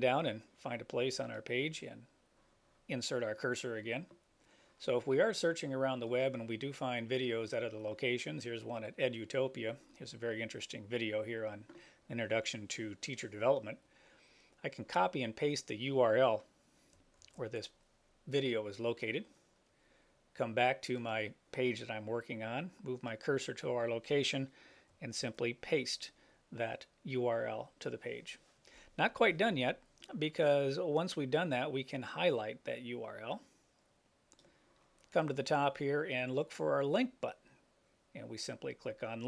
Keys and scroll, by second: 17.5 super+c, 25.3 super+v.